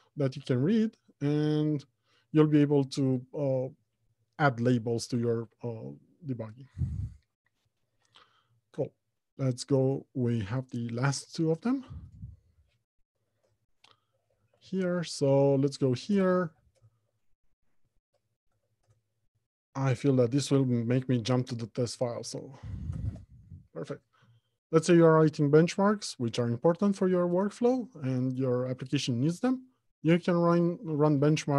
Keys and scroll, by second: 0.7 ctrl+Tab, 1.3 ctrl+Tab, 4.1 ctrl+Tab, 13.6 alt+Home, 14.6 Escape, 15.4 alt+Home, 15.9 Left, 16.3 Return, 21.1 alt+Home, 22.0 Left, 22.6 Down.